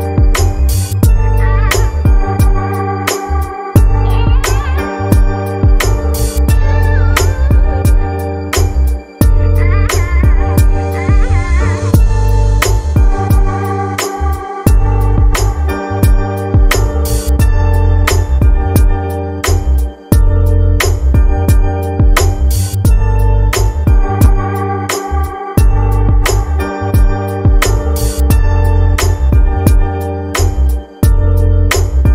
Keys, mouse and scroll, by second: 0.4-1.6 drag, 1.6-2.3 scroll down 1, 2.3-2.7 scroll down 3, 3.2-5.3 drag, 5.3 KP_3, 7.2-7.5 scroll down 2, 7.9-10.6 drag, 10.6-11.5 scroll down 4, 13.0-14.3 drag, 14.3-15.3 scroll down 5, 16.0 click, 16.7-18.3 scroll up 25, 20.4-20.9 drag, 21.4-22.4 scroll down 2, 22.4 scroll down 1, 22.7-23.6 shift+middle drag, 23.6 scroll up 4, 24.3-24.9 shift+middle drag, 24.9-25.7 scroll up 2, 25.7-28.1 shift+middle drag, 28.1 click, 29.8 click, 31.3 click.